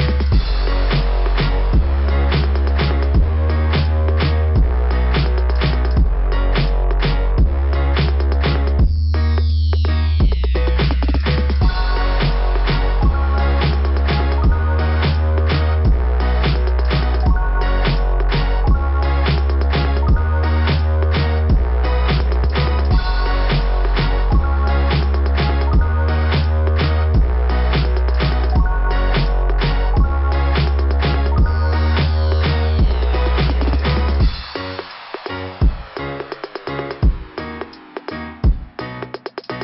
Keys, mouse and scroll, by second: 1.0 scroll up 2, 1.8 click, 2.8 scroll down 2, 5.1 click, 6.3 click, 8.1 scroll down 2, 9.5 click, 10.6 click, 10.7 click, 11.8 click, 12.0 click, 13.0 click, 13.9 click, 14.1 click, 14.8 click, 18.3 click, 18.6 click, 19.0 click, 19.3 click, 19.6 click, 20.0 click, 21.6 click, 26.3 click, 29.0 click, 30.3 click, 30.5 click, 31.2 scroll down 2, 36.9 click, 37.1 click, 37.2 click, 37.3 click, 37.4 click, 38.9 click.